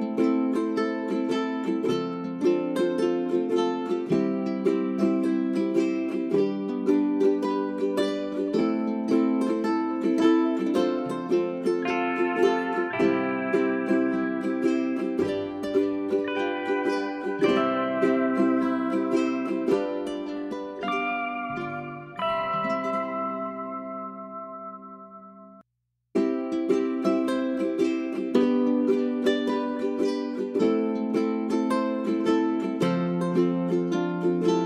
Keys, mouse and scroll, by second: 0.0-1.0 drag, 1.2 scroll up 1, 1.7 click, 2.5 space, 2.8-8.3 drag, 8.3-8.7 scroll up 1, 8.7 click, 9.8-10.6 scroll up 1, 10.6-16.0 drag, 16.0 space, 16.9 click, 17.4 middle click, 18.6-20.4 drag, 20.4 scroll up 1, 20.7-22.0 drag, 22.7-23.0 scroll up 1, 23.0-34.6 drag.